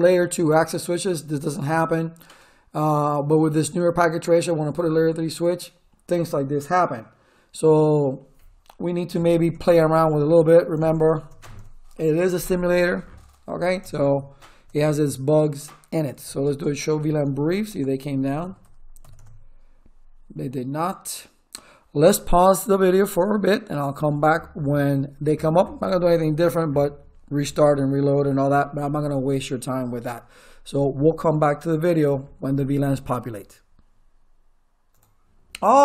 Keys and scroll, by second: 9.1 Return, 13.5 e, 13.7 Return, 16.0-19.4 typing.